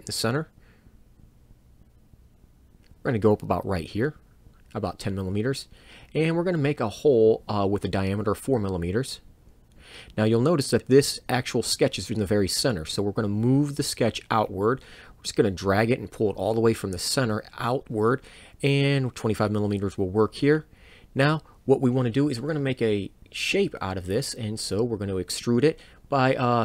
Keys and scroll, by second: 6.7 4, 7.0 m, 9.8 Return, 13.5 m, 23.1 Return, 24.2 e.